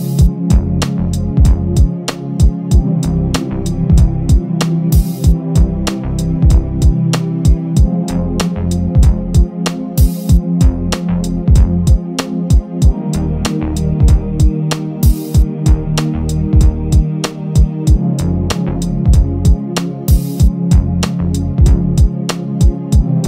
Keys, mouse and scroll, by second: 1.0 e, 2.0-2.6 scroll up 1, 2.6 l, 3.0 g, 4.2-4.6 scroll down 6, 4.6 Tab, 4.9-5.2 scroll down 1, 5.2 KP_1, 5.5-6.9 scroll down 4, 6.9 Tab, 7.0-8.1 scroll up 8, 8.1 s, 10.2 Tab, 10.4-10.8 scroll down 7, 10.8 click, 11.5 click, 13.5 click, 16.0-18.0 drag, 18.7-19.2 scroll down 4, 19.2 click, 20.3-21.5 scroll up 7, 21.5 click.